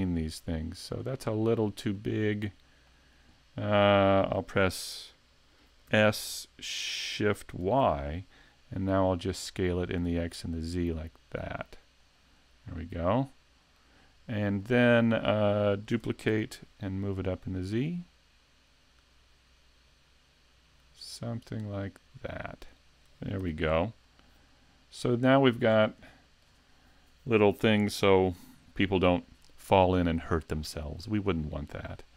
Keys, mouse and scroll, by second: 1.2 click, 2.0 middle click, 5.9 s, 12.1 click, 12.4-12.7 scroll down 2, 12.7 middle click, 14.3 middle click, 15.9 shift+d, 22.8 shift+click, 23.4 a, 23.7-24.0 scroll down 3, 24.0 middle click, 25.7-26.0 scroll down 2, 26.1 shift+middle click, 29.4-29.8 scroll up 3, 29.8 shift+middle click, 30.4 middle click, 31.0 scroll up 2, 31.4 shift+middle click, 31.9 scroll up 1.